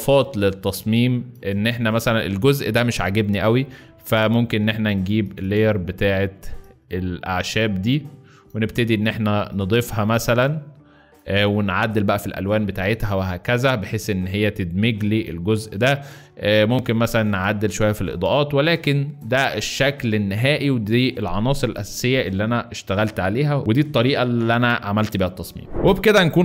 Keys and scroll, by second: 0.6 alt+space, 15.3 Escape, 16.0 alt+Escape, 16.7 alt+space, 18.1 alt+space, 19.4 alt+space.